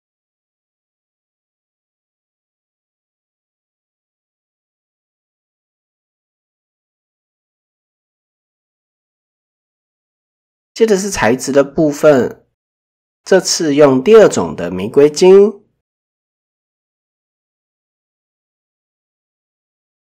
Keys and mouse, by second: 3.5 Tab, 4.1 middle click, 4.6-7.3 middle drag, 9.3-9.7 middle drag, 16.1 click, 19.1 click.